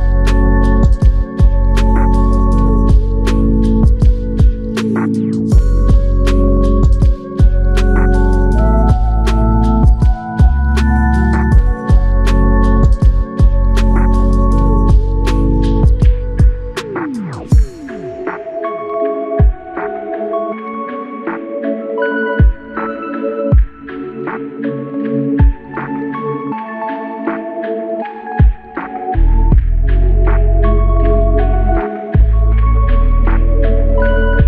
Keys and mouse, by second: 2.7 alt+click, 2.8 shift+click, 4.0 alt+shift+click, 12.7 alt+click, 12.9 shift+click, 13.8 shift+click, 17.0 alt+click, 20.6 shift+click, 26.3 shift+click, 27.3 alt+shift+click, 28.3 alt+click, 29.9 alt+click.